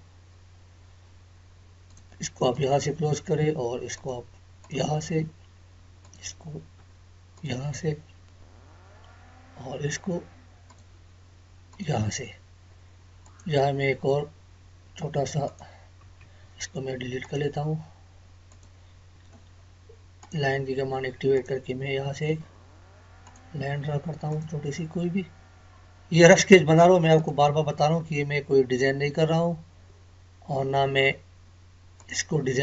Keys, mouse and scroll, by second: 1.9 click, 10.7 click, 16.2 Escape, 17.2 click, 27.2 click, 30.9-31.8 scroll up 1.